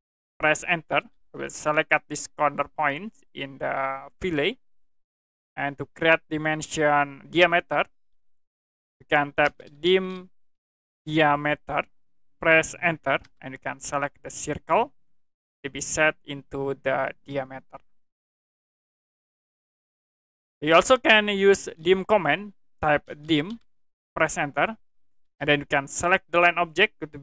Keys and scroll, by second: 1.0 space, 9.2-11.4 typing, 13.2 Return, 22.8-24.0 typing, 25.2 space.